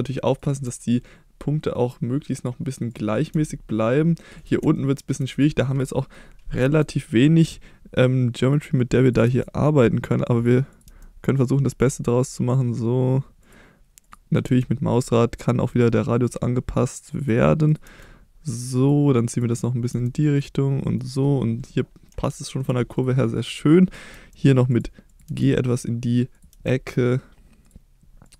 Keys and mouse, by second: 0.3 click, 0.6 g, 2.3 click, 3.3 g, 4.4 click, 4.7 shift+middle click, 6.6 g, 8.4 click, 9.2 g, 10.4 click, 10.8 g, 13.4 click, 14.4 g, 17.2 click, 17.8 g, 18.7 click, 19.3 click, 19.9 g, 20.3 click, 22.3 middle click, 23.0-24.1 drag, 24.1 g, 24.7 click, 25.2 g, 25.7 click, 26.5 g, 27.6 click.